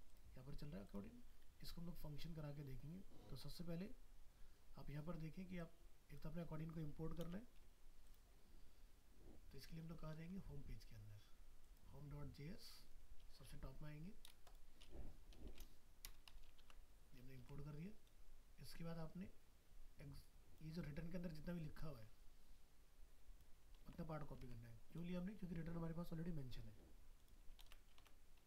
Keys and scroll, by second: 7.2 ctrl+c, 9.8 ctrl+s, 10.2 ctrl+w, 13.8 ctrl+Home, 16.6 ctrl+v, 17.4 alt+Tab, 23.8 ctrl+c, 24.4 alt+Tab, 27.6 ctrl+v, 28.0 ctrl+s.